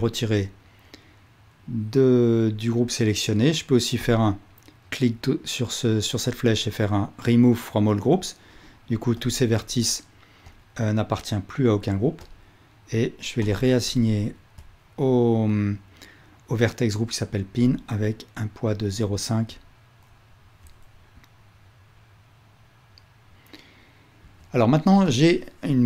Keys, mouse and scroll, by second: 9.7 click, 10.5 click, 12.3 click, 13.5 ctrl+click, 14.6 click, 17.7-25.8 ctrl+drag, 24.2 Tab.